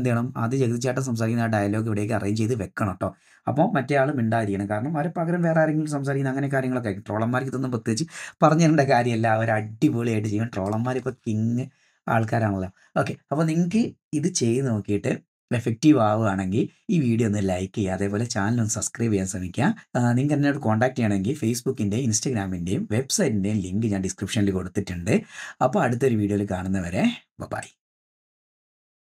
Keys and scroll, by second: 11.1 space.